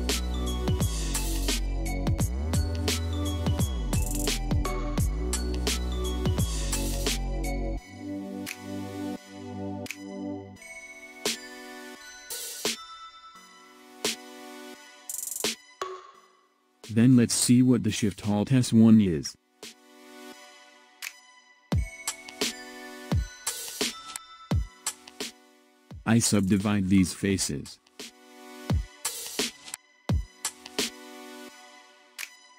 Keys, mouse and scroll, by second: 1.5-1.8 scroll up 2, 1.8-2.2 scroll down 2, 2.2 middle click, 2.6 click, 3.0 s, 4.0 middle click, 4.9 click, 5.5 s, 6.3 middle click, 8.9 click, 9.0 middle click, 10.5 scroll up 3, 10.7 middle click, 10.8 scroll down 3, 11.0 middle click, 11.8 click, 12.3 s, 13.4 scroll down 2, 13.5 middle click, 16.0 click, 17.0-20.0 middle drag, 20.5 click, 22.3 click, 24.5 shift+click, 27.6 click, 29.1 KP_7, 30.6 scroll up 2.